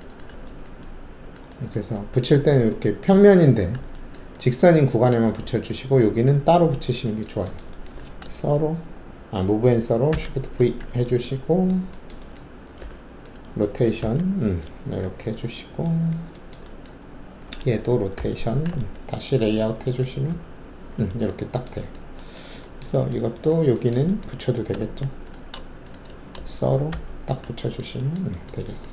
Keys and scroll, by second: 10.1 shift+v, 12.7 alt+5, 14.0 c, 18.1 alt+c, 20.3 alt+z, 24.7 alt+2, 26.9 shift+s.